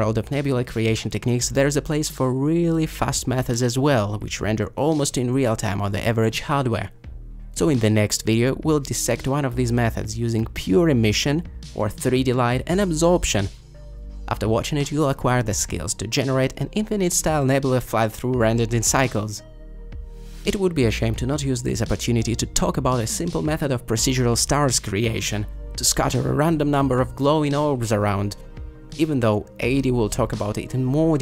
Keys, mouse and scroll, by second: 25.1-25.8 typing.